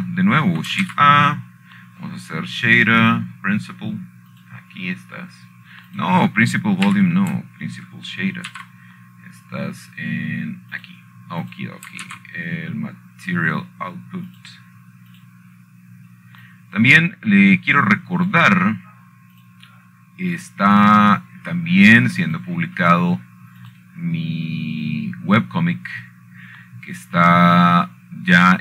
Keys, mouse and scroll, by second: 0.0-1.2 typing, 1.2 Return, 1.4 Return, 3.6 shift+a, 7.0 click, 8.6 click, 9.6 x, 11.2 shift+a, 13.5 click, 13.9 click, 14.2 click, 14.8 shift+a, 17.0 click, 17.4 click, 17.8 click, 19.2-21.1 drag, 22.1 click, 23.4-25.1 drag, 25.7 click, 26.3-27.5 drag, 27.6-28.6 scroll down 1.